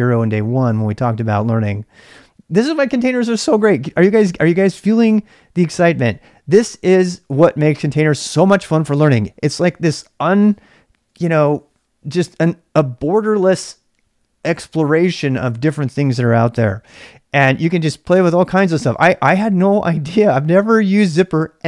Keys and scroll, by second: 0.0-21.6 typing.